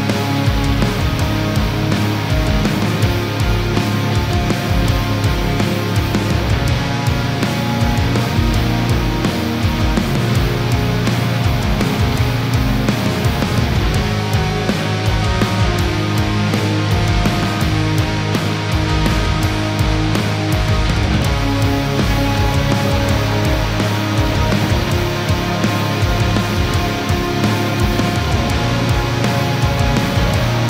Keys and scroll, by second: 1.9 ctrl+-, 4.2 ctrl++, 16.9 space, 20.6 ctrl+-, 24.2 ctrl+-, 27.4 ctrl+-, 29.4 ctrl+-.